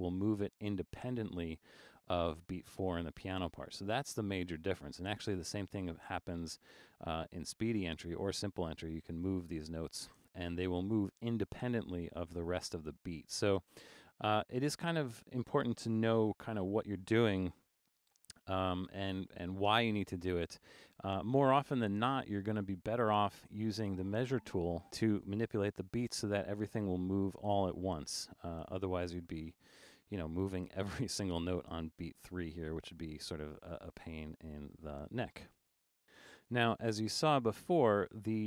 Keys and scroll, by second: 3.3 super+z, 12.1 super+z, 12.8 super+z, 14.7 super+a, 16.4 super+4, 17.7 super+u, 34.5 super+z.